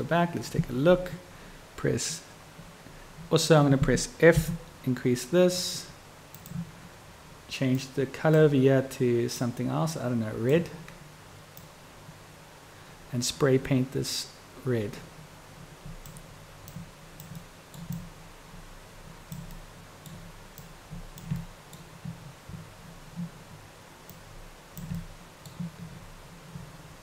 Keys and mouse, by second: 9.5-10.7 drag, 11.6-16.3 drag, 16.8-17.4 drag, 17.5 middle click, 18.1-19.5 drag, 19.7-20.1 drag, 20.1 middle click, 20.8-21.4 drag, 21.6 middle click, 24.2-25.0 drag, 25.1-25.7 middle drag.